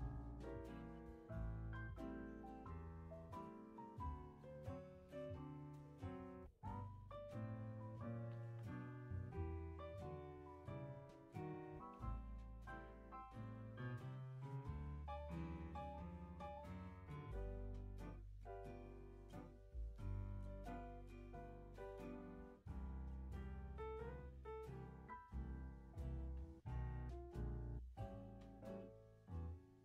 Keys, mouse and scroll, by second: 3.0 ctrl+c, 3.4 ctrl+v, 4.3 click, 6.4 ctrl+z, 6.8 click, 7.1-8.1 drag, 8.4 ctrl+c, 8.7 ctrl+v, 9.0 click, 10.7 click, 12.0 ctrl+z, 12.4-15.5 drag, 17.9-19.3 drag, 19.3 shift+scroll down 1, 19.6-21.0 shift+middle drag, 21.0 g, 24.6-25.0 scroll down 2, 25.5-26.6 middle drag, 26.6 scroll up 2, 26.8 r.